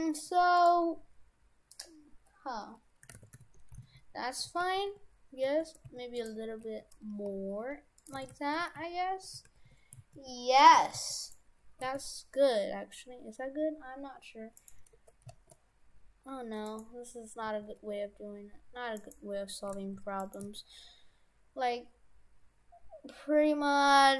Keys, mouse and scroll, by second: 3.2 shift+f, 6.7 s, 8.3 shift+f, 10.8 shift+f, 11.8 s, 17.5 s, 19.7 s, 20.4 s.